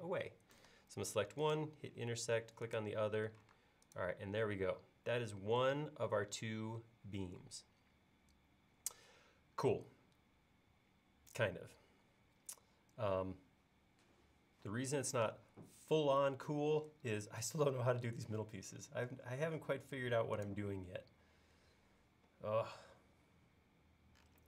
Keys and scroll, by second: 3.6 space, 15.2 m.